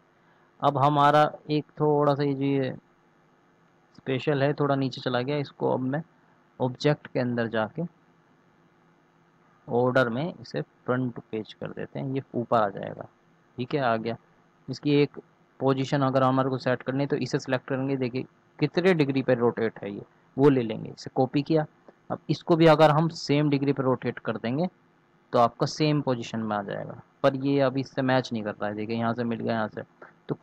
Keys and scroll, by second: 20.8 ctrl+c, 24.4 ctrl+v, 24.8 ctrl+Return.